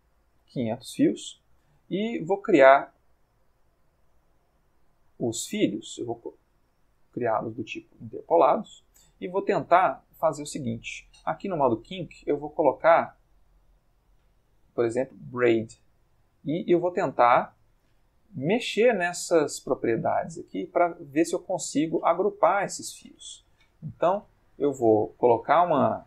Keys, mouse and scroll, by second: 0.3 Return, 6.2-6.7 drag, 7.3-8.7 middle drag, 9.3-10.3 middle drag, 11.8 click, 15.2 click, 19.0-19.6 middle drag, 19.8 middle click, 21.1-21.7 ctrl+shift+middle drag, 23.5-26.0 drag.